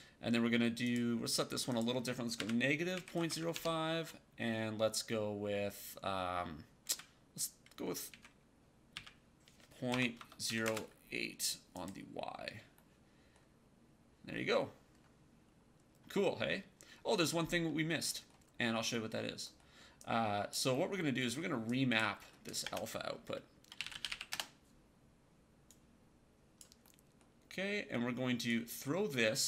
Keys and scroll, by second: 2.3 KP_Subtract, 3.1 KP_0, 3.2 KP_5, 3.4 Tab, 8.8 KP_1, 9.8 BackSpace, 10.1 KP_0, 10.4 KP_8, 10.5 Return, 22.5-24.5 typing.